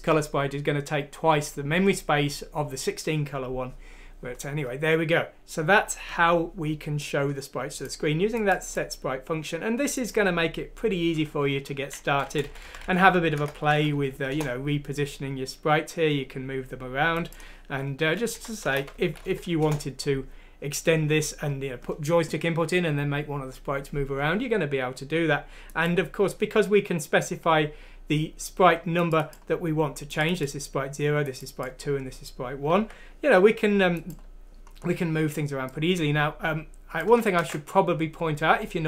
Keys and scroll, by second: 12.3-14.9 typing, 14.3 F6, 14.3 Return, 18.3 Down, 18.7 2, 19.4 F6, 19.6 Return, 32.8 alt+Tab, 37.4 ctrl+c.